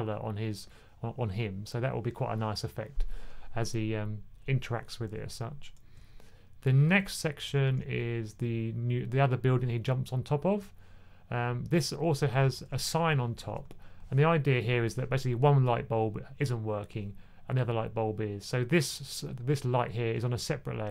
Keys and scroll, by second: 7.5 1, 12.1-12.4 typing, 13.5 typing.